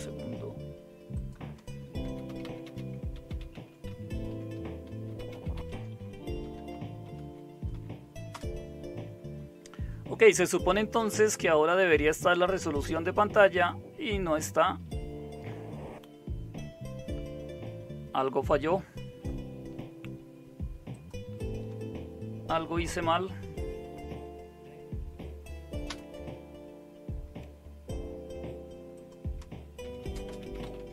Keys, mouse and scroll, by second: 1.8-7.7 typing, 8.3 Return, 25.8 super+Return, 29.6-30.9 typing.